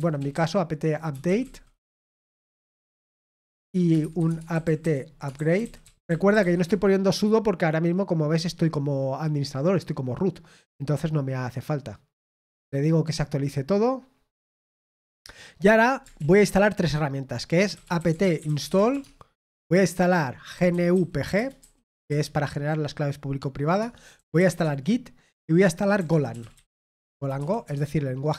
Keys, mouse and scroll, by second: 2.4-7.4 typing, 18.3-19.1 typing.